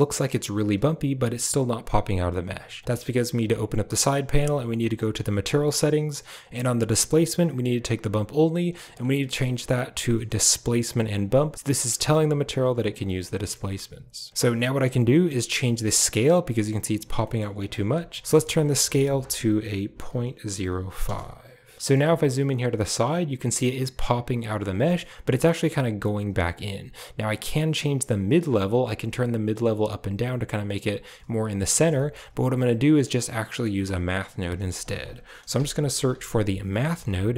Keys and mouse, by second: 2.8 click, 4.8 click, 5.3 click, 7.1-11.1 drag, 11.9 shift+middle click, 13.2 middle click, 15.1 middle click, 18.4-21.0 drag, 21.7 shift+middle click, 24.8 shift+middle click, 27.2-31.4 shift+drag, 31.9 right click, 32.7 typing, 33.4 click, 34.3 shift+a, 36.7 shift+a.